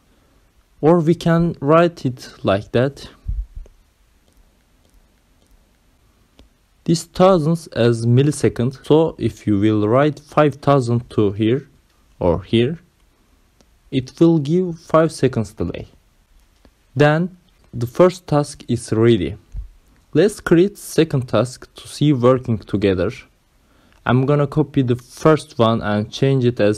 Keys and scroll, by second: 0.6 v, 1.2 shift+t, 1.6 a, 3.7-10.2 typing, 9.7 Right, 15.4 BackSpace, 17.8 ctrl+c, 18.2 ctrl+v, 19.5 2, 20.7 ctrl+c, 22.0 ctrl+c, 22.5 ctrl+v, 23.6 2, 24.6 2, 26.6 ctrl+c.